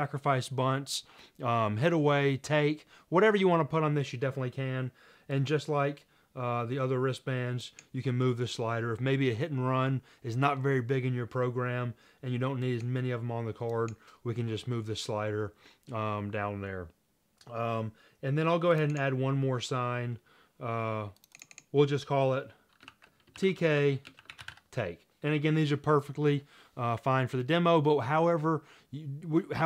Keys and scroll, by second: 23.0-25.7 typing, 23.8 Tab, 26.7-27.5 typing.